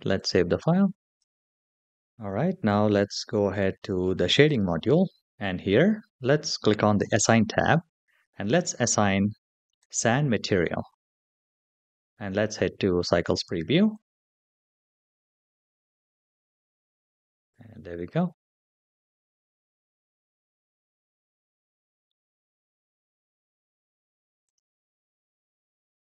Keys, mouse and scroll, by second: 0.0-1.4 drag, 4.2 click, 6.8 click, 7.7-9.4 scroll down 2, 9.4 click, 9.4-10.0 scroll down 1, 15.2 click, 17.5-18.4 shift+middle drag, 19.5 click, 20.9-22.0 middle drag, 24.4 click.